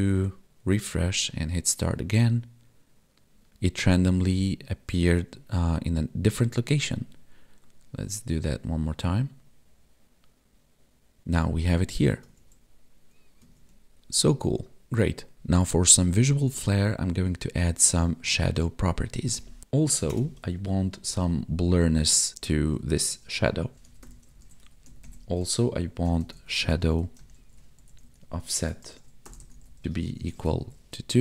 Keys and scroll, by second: 19.3 typing, 29.8 space, 30.2 space.